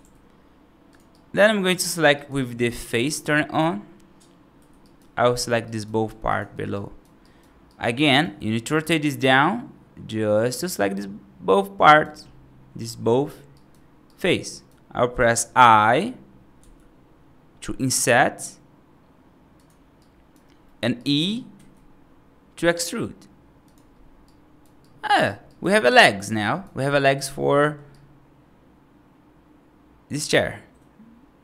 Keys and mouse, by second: 1.0 right click, 1.6 3, 2.0 right click, 4.7 right click, 5.3 click, 5.5 right click, 6.1 shift+click, 6.6 right click, 7.1 right click, 7.5 right click, 8.7-10.3 right drag, 11.7 right click, 13.4 right click, 13.9 right click, 14.4 right click, 16.4 i, 19.8 right click, 20.5 middle click, 20.8 right click, 21.4 e, 24.1 right click, 24.6 right click, 25.3 right click, 25.7 right click, 26.2 right click, 26.7 right click, 26.9 right click, 27.4 middle click, 27.8-31.4 right drag.